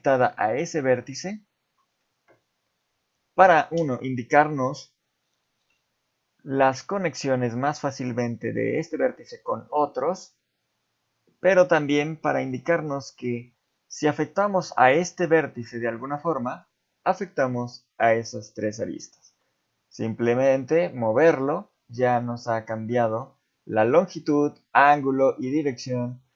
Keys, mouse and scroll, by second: 12.2 shift+middle click, 15.2 g, 20.3 g, 25.7 ctrl+z.